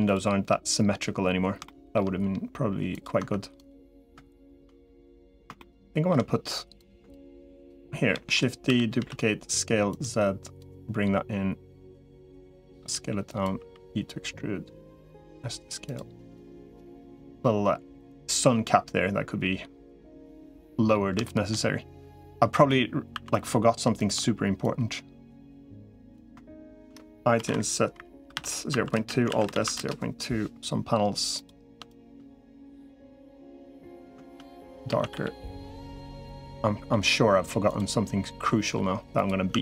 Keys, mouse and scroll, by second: 1.5 shift+middle click, 3.1 Tab, 4.6 middle click, 5.4 middle click, 8.1 shift+d, 8.5 s, 10.5-11.9 drag, 10.5 s, 12.7 s, 13.5 e, 15.1 s, 16.5-19.7 drag, 19.9 middle click, 21.1 shift+middle click, 23.3 2, 24.5-25.7 drag, 26.1 3, 27.3 i, 29.1 alt+s, 31.7 shift+click, 32.5-33.5 drag, 34.7 a, 35.1 g, 36.3 middle click, 37.5 click, 38.5 g, 39.5 Tab.